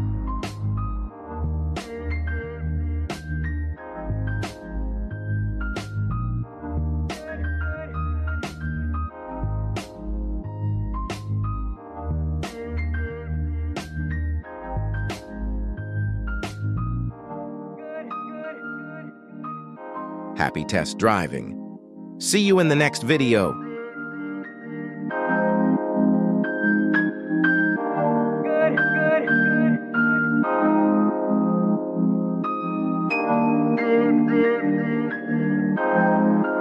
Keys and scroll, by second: 0.2 Escape, 2.0 ctrl+Tab, 3.1 g, 3.2 y, 5.7 Escape, 7.9 r, 9.1 Escape, 11.8 r, 13.4 Escape, 16.1 r, 18.3 Escape, 20.2 r, 21.7 Escape, 22.5 r, 25.1 f, 25.4 g, 26.8 r, 27.7 g, 28.5 r, 29.1 g, 30.4 alt+g, 30.5 r, 31.7 alt+r, 32.7 r, 33.2 z, 35.2 Escape, 36.2 g.